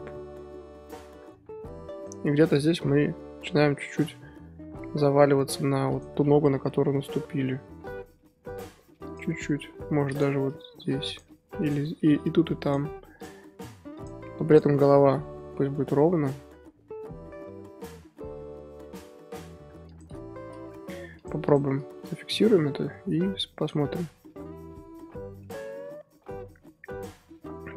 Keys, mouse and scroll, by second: 3.0-3.9 middle drag, 3.9 scroll down 1, 4.1-6.0 middle drag, 6.0 click, 6.2-6.5 scroll up 2, 6.5 KP_1, 7.8 r, 9.3-9.8 scroll up 1, 9.8 scroll up 1, 9.9 ctrl+z, 10.2 drag, 10.5 r, 11.7 click, 12.1 r, 13.3 click, 13.5 r, 14.6 drag, 14.8 r, 20.4-21.2 scroll up 2, 21.2 scroll up 1, 21.4 shift+click, 22.3 i, 23.7-24.4 drag, 24.4-24.9 scroll down 4, 25.1-26.9 middle drag, 26.9-27.7 drag.